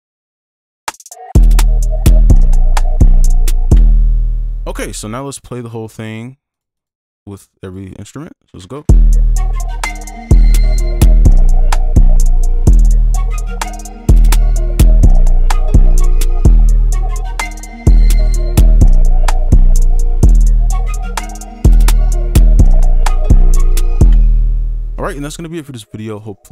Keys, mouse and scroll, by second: 0.8 space, 2.3 right click, 3.7 space, 4.6 double click, 15.5-17.5 scroll up 1, 24.1 space.